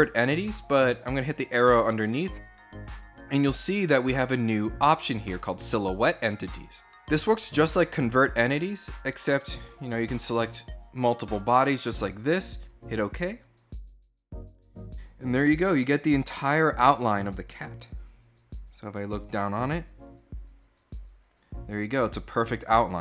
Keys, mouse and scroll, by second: 1.2 click, 6.1 click, 8.4 click, 9.2 click, 9.6 click, 10.4 click, 18.9 click.